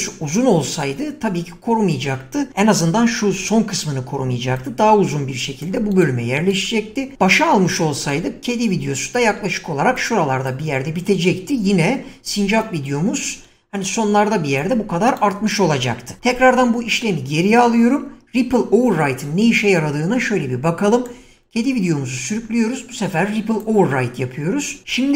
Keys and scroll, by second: 2.8 <, 9.2 <, 16.4 ctrl+z.